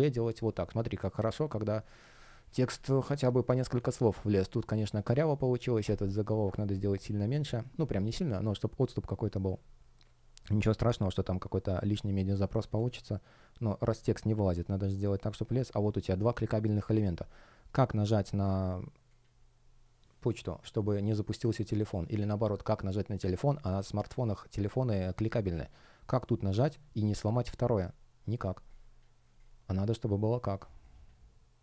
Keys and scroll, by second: 2.6 space, 9.9 space, 28.4 space.